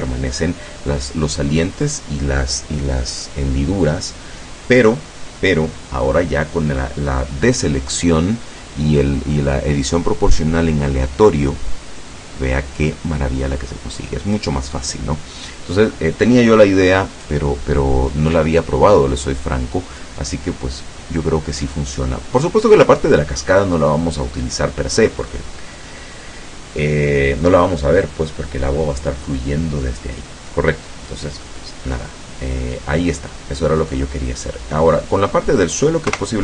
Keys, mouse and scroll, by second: 31.5-34.1 middle drag, 34.5 right click, 35.1-35.8 middle drag, 36.1 KP_0.